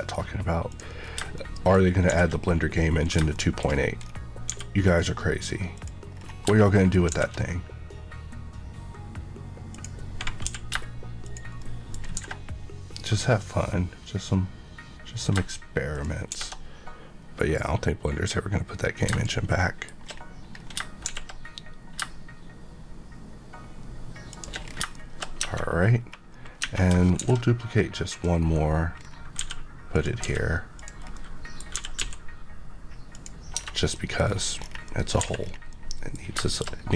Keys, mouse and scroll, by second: 0.6 click, 0.9-1.3 scroll down 1, 1.3 middle click, 2.0 d, 3.0 click, 3.3 middle click, 3.6 scroll up 1, 4.4 g, 5.7 click, 6.1 scroll down 1, 6.5 middle click, 7.0 d, 9.7 click, 10.4 g, 11.2 click, 11.5 middle click, 12.1 d, 15.9 click, 16.2 d, 19.0 click, 19.5 middle click, 20.0 scroll down 1, 20.5-21.0 scroll down 1, 21.0 d, 24.2 click, 24.6 scroll down 1, 24.9 middle click, 25.3 Tab, 25.9-26.2 scroll up 1, 26.5 Tab, 27.1 d, 28.0 click, 28.3 KP_Decimal, 28.9 scroll down 1.